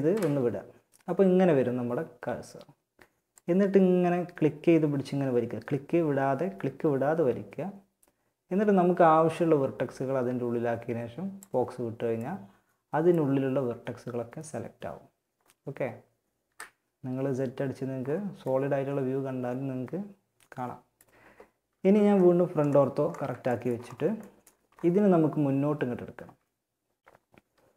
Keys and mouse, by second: 11.4-18.1 middle drag, 15.6 z, 19.5-23.6 middle drag, 21.2 KP_1.